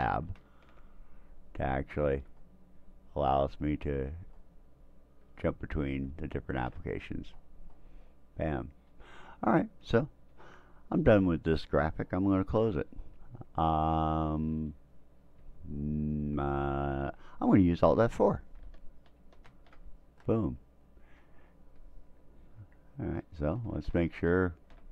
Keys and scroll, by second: 0.4 alt+Tab, 2.1 alt+Tab, 4.1 alt+Tab, 6.1 alt+Tab, 19.4 alt+F4, 24.0 alt+Tab.